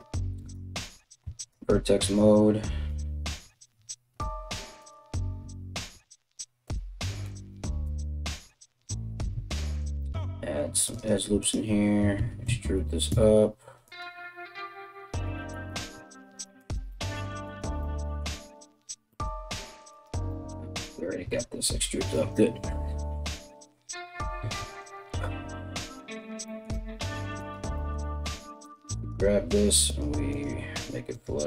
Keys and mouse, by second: 0.0 right click, 0.8 1, 1.0 right click, 1.6 right click, 2.5 g, 4.4 right click, 6.8 click, 7.0 g, 9.2 ctrl+r, 11.0 alt+click, 11.8 e, 15.0 ctrl+z, 16.2 right click, 17.1 right click, 18.0 z, 19.5 right click, 20.8 z, 24.2 KP_1, 27.0 right click, 27.8 g, 28.6 right click, 28.7 g, 29.9 right click, 30.1 g, 30.7 right click, 30.8 middle click, 30.8 g.